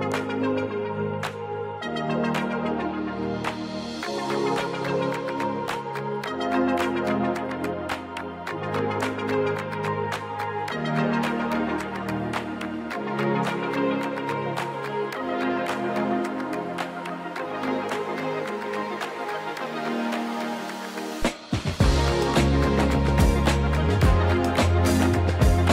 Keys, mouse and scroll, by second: 2.4 shift+click, 3.4 shift+click, 3.8 shift+click, 4.2 shift+click, 4.7 shift+click, 5.9 shift+click, 6.2 shift+click, 6.7 shift+click, 7.1 shift+click, 7.8 shift+click, 9.0 click, 10.4 click, 11.0 click, 12.1 click, 14.4-15.9 drag, 16.9-17.4 scroll down 1, 19.2 click, 25.3-25.7 scroll down 1.